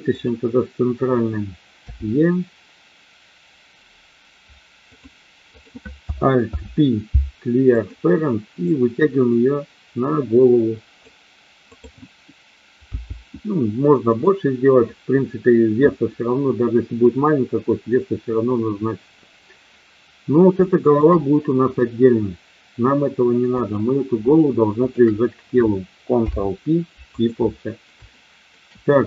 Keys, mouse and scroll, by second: 0.0 click, 1.9 e, 4.8 click, 5.5 click, 6.5 alt+p, 8.6-11.0 drag, 11.6 click, 12.9 g, 14.0 click, 20.5 shift+middle click, 23.6 click, 24.8 shift+click, 26.1 ctrl+p, 28.0 shift+middle click.